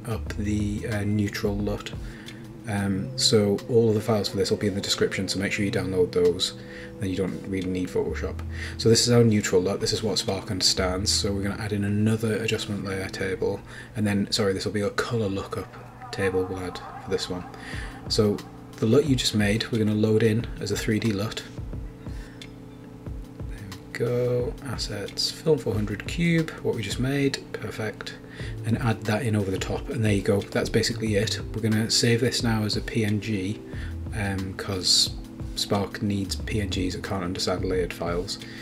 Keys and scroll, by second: 5.2 Return, 15.8-17.0 typing, 17.4 Return, 27.2 Return, 30.9 shift+super+s, 32.2-33.4 typing, 34.2 super+e, 36.5 shift+super+s, 38.3-38.6 typing.